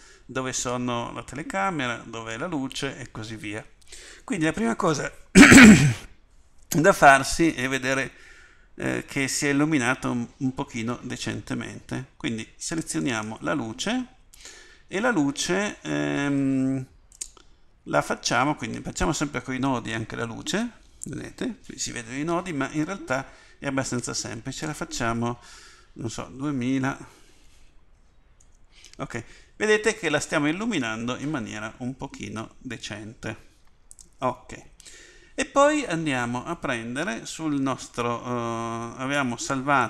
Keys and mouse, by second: 28.4 0.